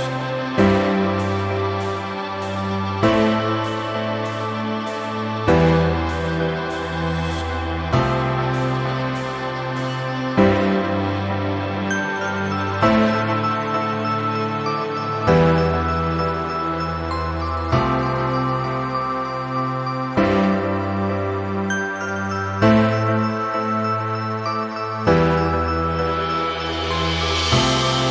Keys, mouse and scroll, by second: 0.6 click, 4.8-5.2 ctrl+scroll down 1, 5.6 shift+click, 6.6 click, 7.6-8.2 ctrl+scroll up 1, 8.3 ctrl+scroll up 1, 9.7 p, 10.9 click, 14.5 c, 14.8 v, 15.4 shift+click, 16.8 ctrl+j, 18.6 click, 20.8 Delete, 21.3-21.8 click, 22.1 ctrl+z, 22.5-28.1 drag.